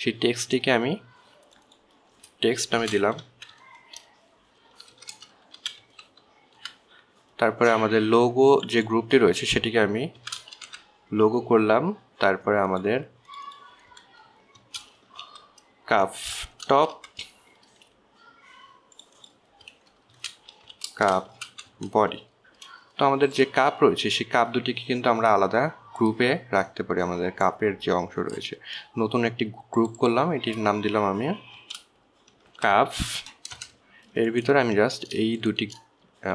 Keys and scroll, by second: 4.1-4.9 typing, 6.3 BackSpace, 6.5 BackSpace, 6.9 x, 7.2 t, 7.9 Return, 11.5-12.0 typing, 15.9-18.3 typing, 21.5-23.4 typing, 32.9 shift+c, 33.7 shift+u, 33.9 shift+p, 34.9 Return.